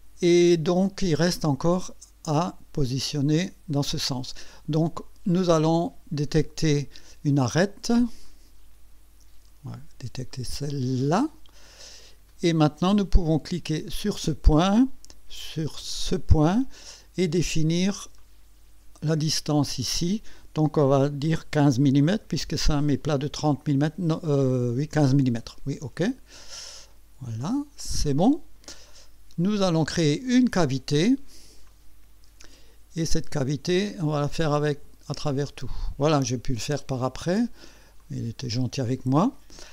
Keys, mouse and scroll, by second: 1.4-3.9 drag, 8.2 click, 11.0 click, 12.3 right click, 13.9 click, 16.0 click, 18.2 click, 22.1 KP_1, 22.8 KP_5, 24.8 KP_Enter, 27.4 click, 31.7 click, 33.8 click, 34.2 click, 34.4 click, 35.2 click, 36.1 click, 38.0 click.